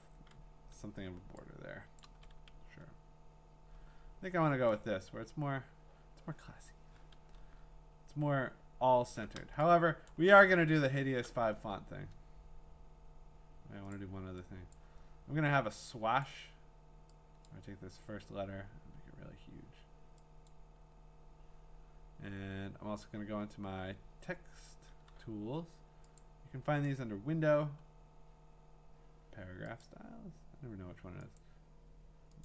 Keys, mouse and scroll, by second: 1.6-2.1 scroll, 2.0 click, 2.7-3.6 scroll, 3.6-4.5 scroll, 7.5-9.4 scroll, 9.6-10.3 typing, 10.1 click, 10.4-11.2 scroll, 11.5 t, 13.9 click, 14.7 click, 16.2 click, 17.5 click, 20.5 click, 26.2-29.3 drag, 29.9 click, 31.4 click.